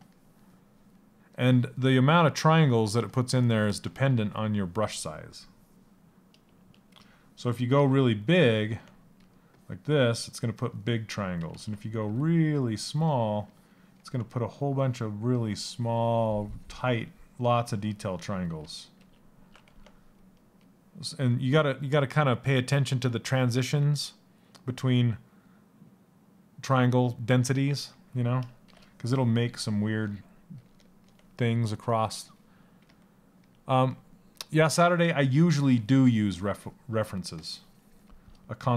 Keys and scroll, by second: 4.5 Escape, 11.1 ctrl+z.